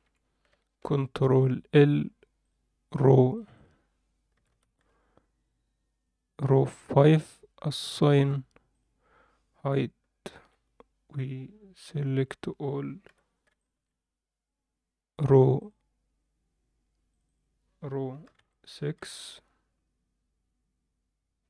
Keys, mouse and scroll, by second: 0.8 ctrl+l, 2.4 click, 3.3 click, 3.5-7.1 drag, 8.7 click, 10.3 h, 11.2-11.8 scroll down 1, 12.1 a, 13.1 b, 15.6 click, 17.2-19.1 drag.